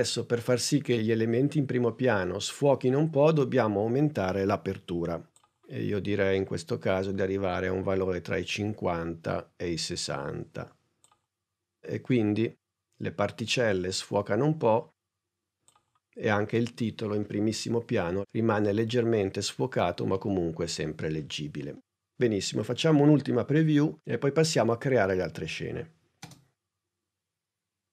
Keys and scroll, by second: 26.1 space.